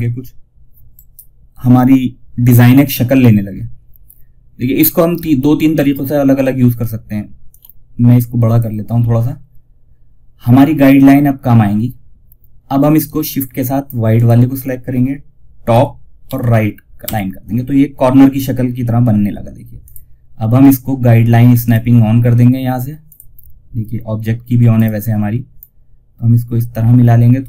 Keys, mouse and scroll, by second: 0.2 right click, 6.8-13.4 drag, 12.9 shift+Num_Lock, 15.0-15.5 typing, 19.1-27.4 drag.